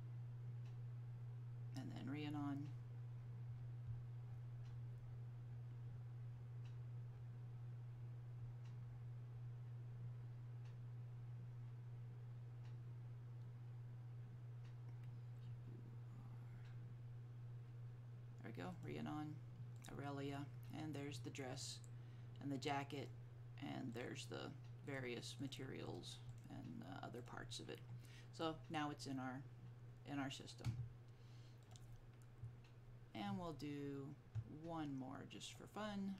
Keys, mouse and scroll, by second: 1.6-4.9 scroll down 1, 10.6-11.2 scroll up 1, 11.2-12.3 scroll down 1, 12.6-12.9 scroll down 1, 15.7-17.6 scroll down 1, 18.9 click, 23.1 click, 26.0 double click, 35.6 click.